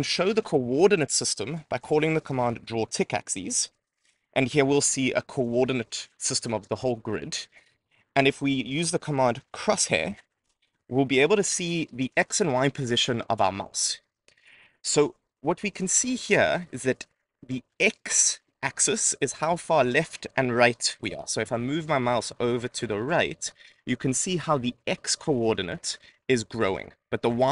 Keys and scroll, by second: 4.5 Right, 8.8 Return.